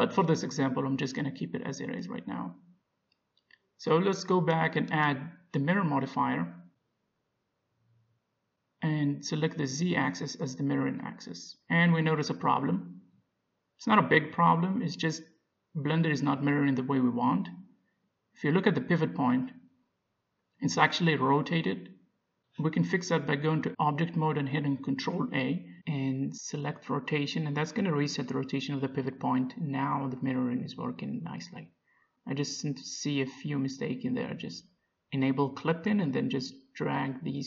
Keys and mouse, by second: 3.5 Tab, 5.9-7.6 drag, 10.2-11.8 drag, 11.8-15.6 middle drag, 15.8-18.0 drag, 16.9 middle click, 18.0 middle click, 18.3 click, 22.0-24.9 middle drag, 26.1 ctrl+a, 30.0-31.9 drag, 31.1-34.7 middle drag, 34.7-36.6 drag, 35.3-36.6 middle drag, 37.1 Tab.